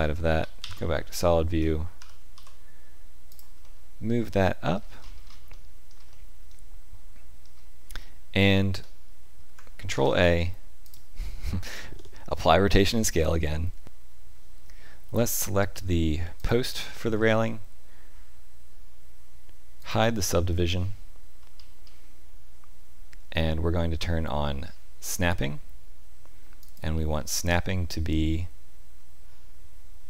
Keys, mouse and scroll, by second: 0.4 z, 2.0 g, 3.6 middle click, 5.0-5.5 scroll up 3, 5.5 shift+middle click, 6.1 middle click, 9.9 ctrl+a, 16.4 click, 19.8 click, 21.5-22.7 scroll up 2, 25.0 click, 26.6 click.